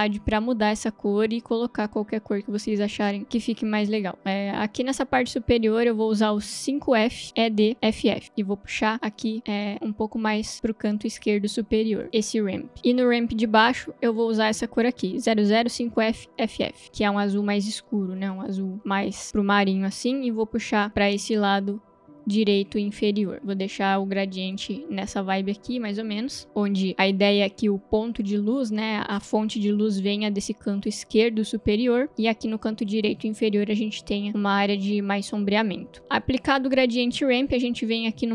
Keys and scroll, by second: 5.8 ctrl+v, 14.6 ctrl+v.